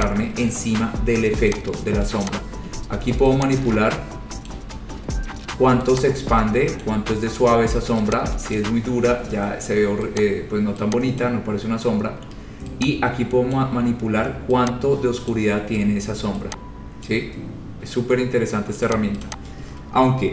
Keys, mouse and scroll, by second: 0.2 click, 1.7 click, 2.5 click, 4.6 click, 7.0 click, 8.8 click, 10.4 click, 11.4 click, 13.8 click, 15.6 click, 17.3 click, 19.0 click, 19.5 click, 20.0-20.3 scroll.